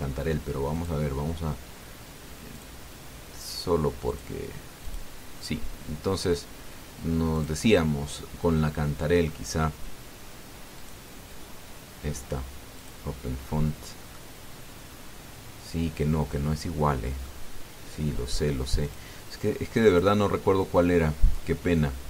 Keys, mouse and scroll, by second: 1.6 click, 3.4 click, 4.3 click, 4.9 click, 5.6 click, 8.1 click, 11.5 click, 13.5 click, 14.6 scroll down 1, 14.9-18.2 middle drag, 19.6 click, 20.6 click.